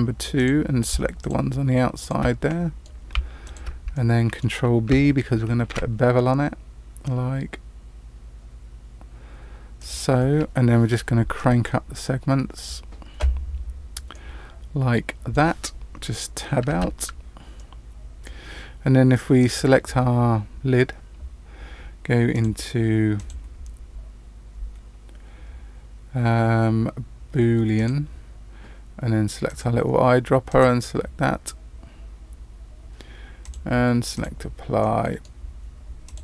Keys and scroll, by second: 5.7 ctrl+b, 16.7 Tab.